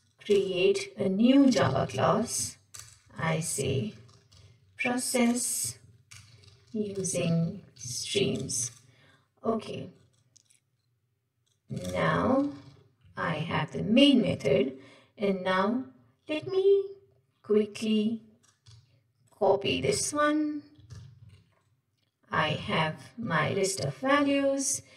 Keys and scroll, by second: 11.9 shift+Return, 13.2 Tab, 14.4 ctrl+Tab, 19.9 ctrl+w, 20.8 ctrl+w, 20.9 ctrl+c, 21.5 ctrl+Tab, 22.7 ctrl+v, 24.3 ctrl+Tab.